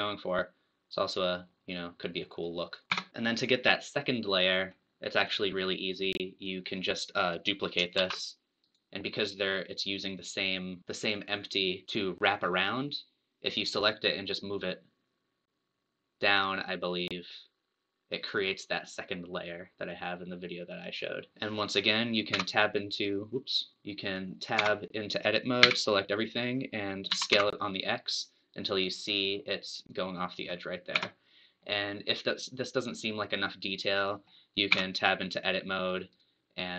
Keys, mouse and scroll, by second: 3.1 scroll up 1, 4.3 middle click, 5.2 click, 6.7 click, 8.0 shift+d, 14.0 click, 21.3-22.3 middle drag, 22.3 `, 24.3 click, 24.6 Tab, 25.7 a, 27.3 s, 30.9 Tab, 31.6-34.8 middle drag, 34.8 Tab, 36.1-36.7 right drag.